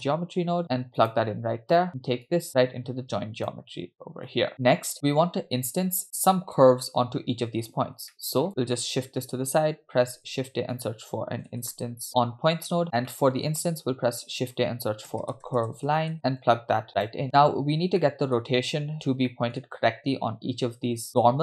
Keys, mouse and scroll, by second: 2.3-4.5 drag, 8.1 middle click, 8.8 click, 10.3 shift+a, 12.8 click, 13.1 middle click, 13.7 shift+a, 16.4-17.1 drag, 18.1-18.4 middle drag, 19.3 middle drag.